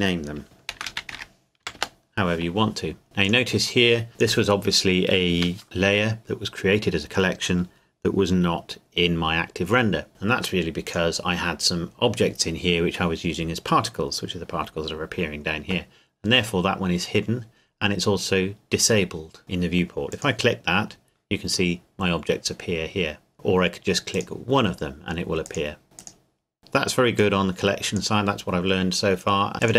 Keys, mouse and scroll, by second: 0.7-1.6 typing, 1.8 Return, 3.2 click, 10.8 click, 20.1 click, 23.3 click, 27.2 click, 29.6 click.